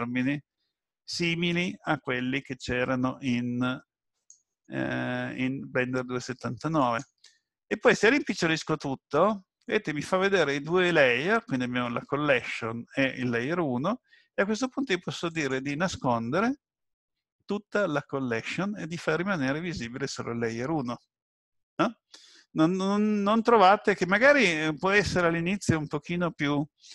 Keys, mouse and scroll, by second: 4.1 click, 6.8 click, 15.3 click.